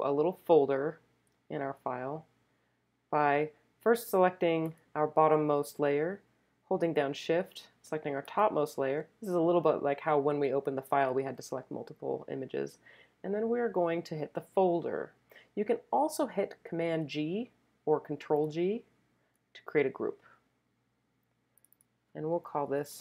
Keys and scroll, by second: 22.5-23.0 typing.